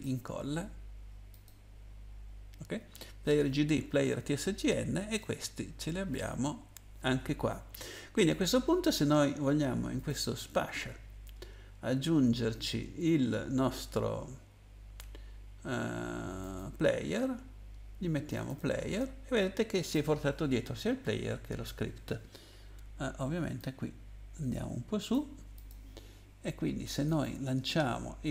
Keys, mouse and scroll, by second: 1.3 click, 5.1 click, 6.1 click, 10.0 click, 16.4 click, 18.3 click, 18.4 click, 23.5 click, 25.5 click, 27.1 click.